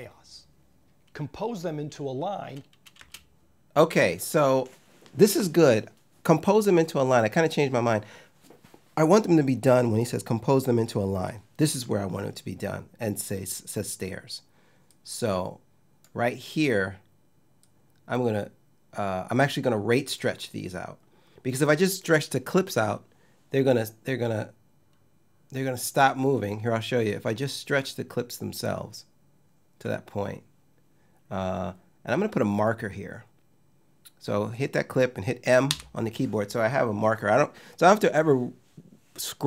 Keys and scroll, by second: 2.6 space, 35.3 m.